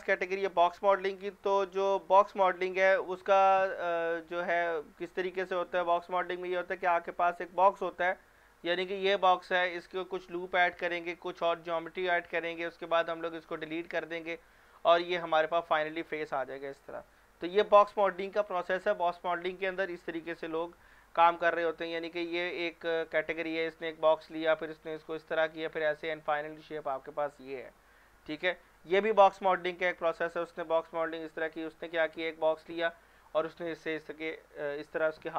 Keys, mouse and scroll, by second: 1.7 click, 2.9 click, 7.5 click, 22.2 click, 26.3 scroll down 1, 29.7 scroll down 1, 31.3 click.